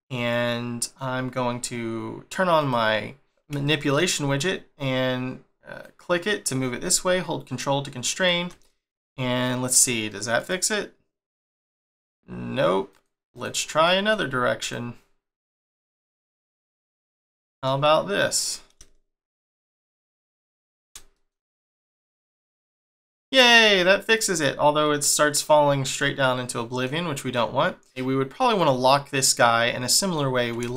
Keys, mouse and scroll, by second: 2.5 click, 3.6 shift+middle click, 7.9 click, 8.6 middle click, 10.3 click, 12.9 click, 13.3 click, 13.8 middle click, 14.5 click, 15.4 click, 15.8 middle click, 17.2 middle click, 18.4 click, 21.1 middle click, 21.8 click, 23.5 click, 24.0 click, 24.4-24.8 scroll down 1, 24.8 middle click, 25.9 middle click, 27.2-27.9 scroll up 1, 28.0 click, 29.5-29.8 scroll down 1, 29.8 middle click.